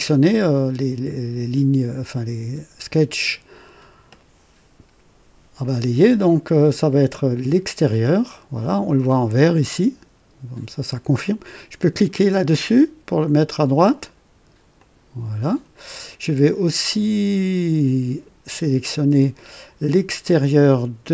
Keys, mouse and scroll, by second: 7.9 click, 14.8 click.